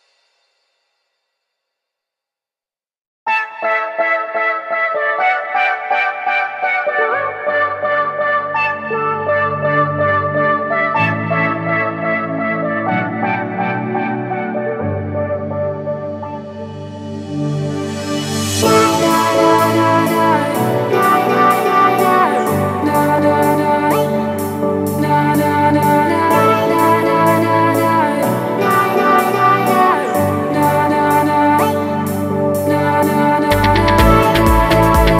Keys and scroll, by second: 10.5 Escape, 12.1 super+g, 17.5 super+c, 18.9 super+v, 29.2 super+c, 32.9 super+v.